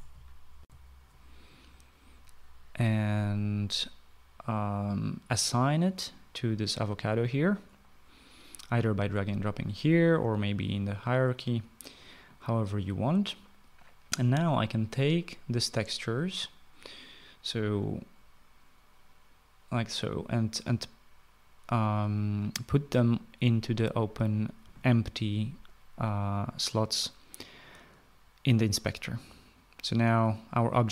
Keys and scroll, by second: 0.9 shift+F9, 1.2 shift+F9.